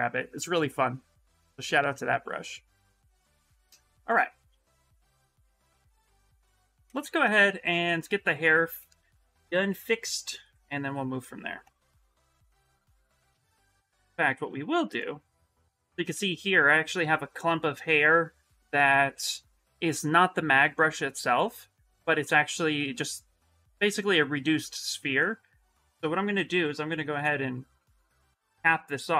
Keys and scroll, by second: 12.9 s, 13.4 shift+f, 15.5 shift+f, 15.9 shift+f, 25.6 s.